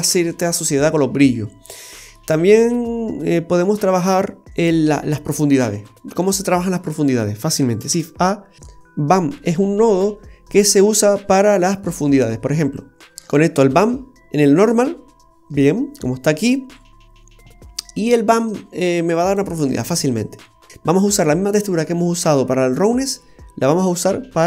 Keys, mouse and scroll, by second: 1.4-1.8 scroll down 2, 1.7 middle click, 2.3-3.0 scroll up 7, 3.0-4.0 scroll down 1, 5.6-6.2 scroll down 2, 5.9 middle click, 6.5-6.9 scroll down 2, 7.9 shift+a, 11.3-11.8 scroll up 5, 12.8 click, 18.8 click, 19.8-20.3 scroll down 3, 20.5 middle click, 20.7-21.2 scroll up 7, 23.9 click.